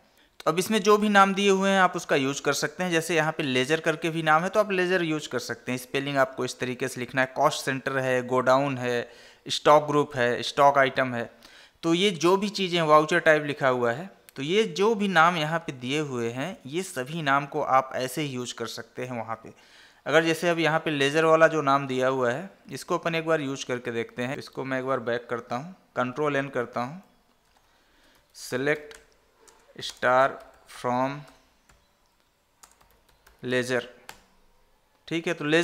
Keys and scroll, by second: 1.9 Left, 7.3 Down, 9.3 Down, 14.3 Down, 24.5 Escape, 26.3 ctrl+n, 27.8 ctrl+n, 29.8 space, 30.2 space, 32.9 space.